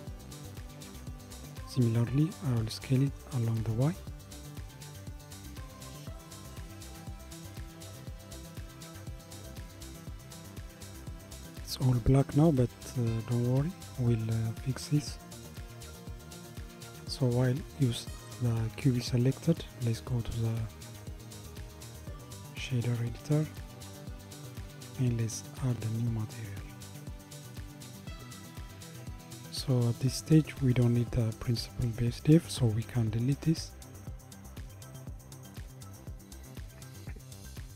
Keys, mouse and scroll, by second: 3.4 s, 14.0-17.0 middle drag, 20.1-23.1 drag, 25.5-28.3 drag, 28.3 g, 30.5 click, 33.6 Delete.